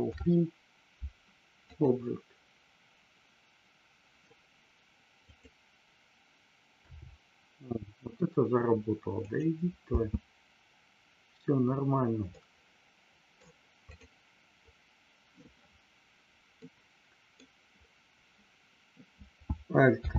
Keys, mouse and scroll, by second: 5.3 click, 9.2 click, 9.9 space, 12.3-13.3 middle drag, 13.3 scroll down 1, 13.9 click, 16.5 middle click.